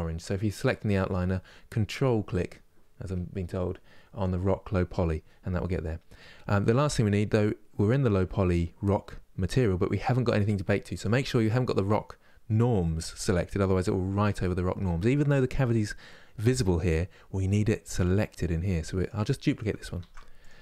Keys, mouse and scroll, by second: 18.7 click, 19.7 shift+d.